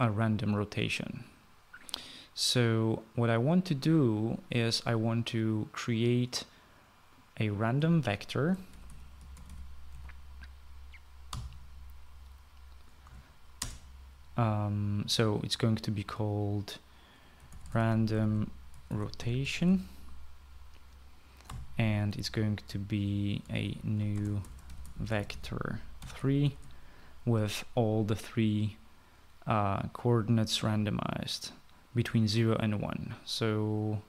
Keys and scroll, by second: 9.1-10.7 typing, 12.1 typing, 13.8 BackSpace, 14.4 space, 17.9-21.0 typing, 22.3 typing, 24.0-27.2 typing.